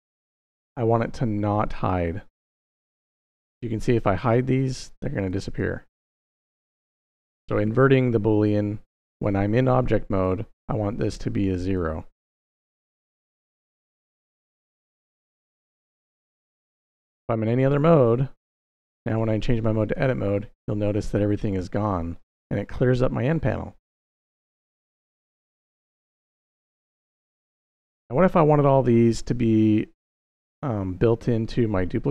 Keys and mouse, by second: 2.2-3.0 middle drag, 4.0 click, 4.4 click, 4.7 click, 5.0 click, 5.3 click, 6.3 click, 9.0-10.0 drag, 10.9-11.6 drag, 12.4-13.2 drag, 14.0-14.9 drag, 15.0 middle click, 16.0-17.1 drag, 17.6 middle click, 19.0-19.9 drag, 24.6-25.4 drag, 26.4 middle click, 27.2 middle click.